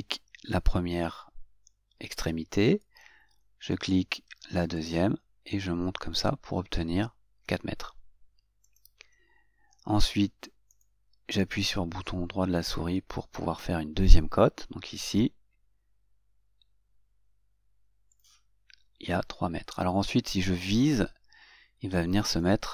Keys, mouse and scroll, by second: 5.2 click, 9.0 click, 11.1 right click, 15.3 click, 22.6 click.